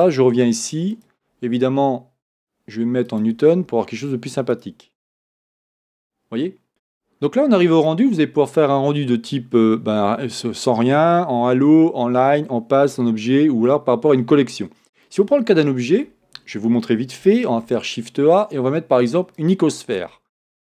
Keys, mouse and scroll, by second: 2.3-20.7 drag, 16.0-17.6 scroll down 2, 17.6 shift+a, 20.3-20.7 scroll down 2.